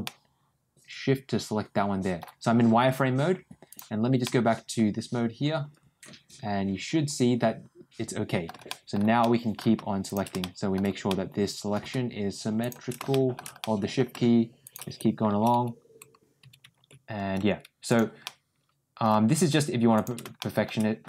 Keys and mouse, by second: 3.6 click, 4.1-8.3 middle drag, 8.6 shift+middle click, 9.1 shift+middle click, 10.3 shift+middle click, 11.0 middle click, 13.0 shift+middle click, 13.5 middle click, 14.6 shift+click, 18.1 middle click, 19.8 shift+click, 20.3 shift+middle click.